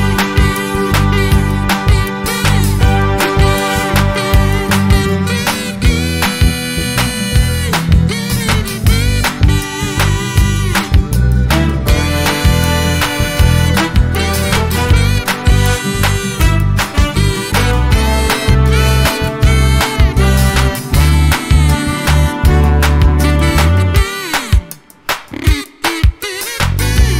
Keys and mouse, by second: 7.8 click, 12.4 click, 13.0 click, 15.2 click, 18.2 click, 21.3 click, 22.7 click, 23.2 space, 23.7 =, 24.3 space, 25.4-27.1 typing.